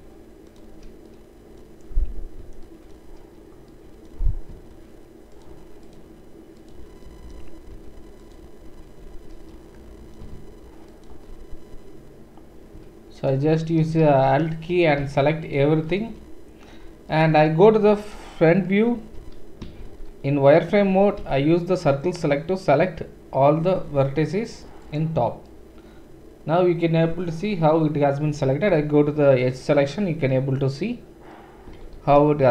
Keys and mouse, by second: 0.5 shift+middle click, 0.5-6.0 shift+right drag, 5.9-7.2 shift+drag, 5.9 shift+middle click, 7.2-11.1 shift+right drag, 11.0-14.3 alt+shift+drag, 11.0 alt+shift+middle click, 14.0 ctrl+z, 14.3-24.9 right drag, 15.4 alt+shift+click, 15.4 alt+shift+middle click, 19.1 KP_1, 19.8 shift+z, 21.2 c, 24.9-32.5 middle drag, 28.7 2, 32.0 shift+z.